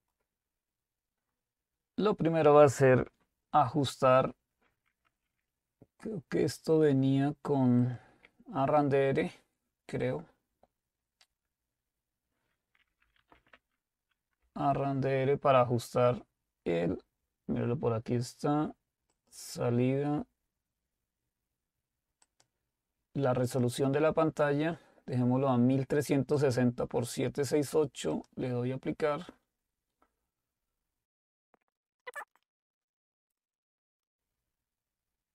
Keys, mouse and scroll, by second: 0.0-1.7 right drag, 7.8 click, 12.6-13.8 typing, 14.4 Return, 19.1 click, 22.3-24.6 drag, 26.4 click, 28.5 click, 31.7 click, 32.3 click, 34.0 click.